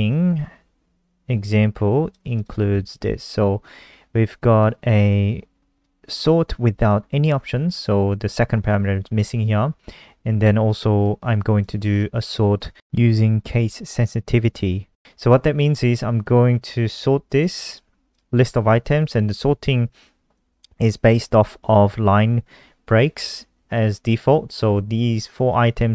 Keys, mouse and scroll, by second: 2.1 c, 2.3 click, 2.8 ctrl+v, 5.7 click, 6.3 click, 8.4 click, 10.9 click, 17.5 click, 19.1 click.